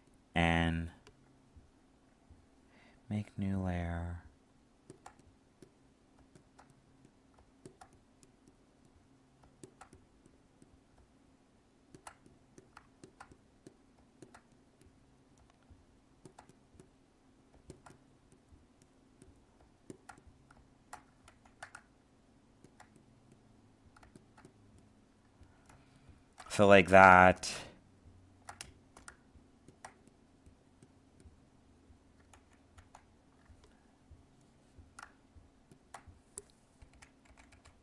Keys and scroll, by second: 21.2 ctrl+z, 25.6 alt+space, 32.3 ctrl+z.